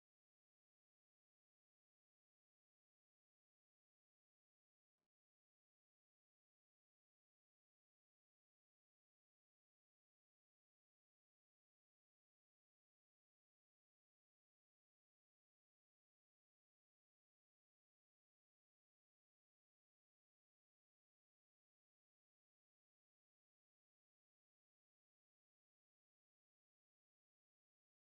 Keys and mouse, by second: 0.6 e, 4.9 ctrl+z, 7.7 e, 8.9 s, 13.5 Tab, 16.5 KP_1, 20.6 Tab, 23.2-24.5 middle drag, 24.5-27.5 right drag, 27.4 KP_1.